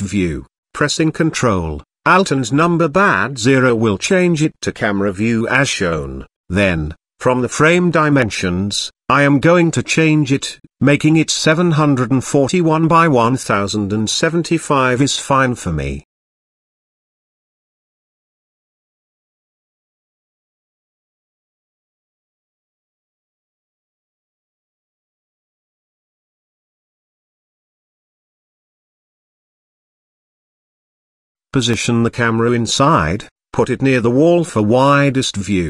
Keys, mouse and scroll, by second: 0.4 ctrl+alt+KP_0, 5.1 click, 6.8-10.1 drag, 11.0-16.5 drag, 17.0-19.0 drag, 19.7-22.2 drag, 25.4 Tab, 25.7 click, 26.6 click, 27.6 KP_7, 29.4 shift+middle click, 29.8 click, 30.6 g, 32.2 g, 35.5 KP_0.